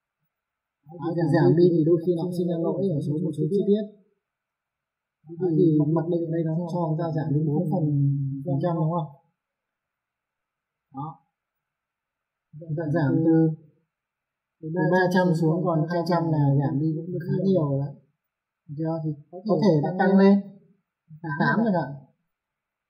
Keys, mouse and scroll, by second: 0.1 F4, 0.7 click, 2.2 alt+middle click, 4.1 middle click, 7.7 middle click, 8.5 alt+middle click, 9.7 F3, 10.8 middle click, 11.5 F4, 12.1 middle click, 14.1 click, 16.8 click, 18.6 click, 20.6 click, 21.7 KP_8, 22.6 click.